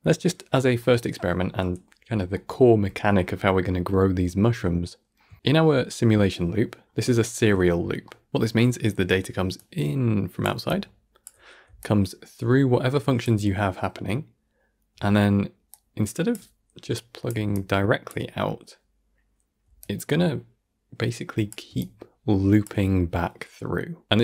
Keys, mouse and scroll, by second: 8.9 d, 15.6-24.2 drag.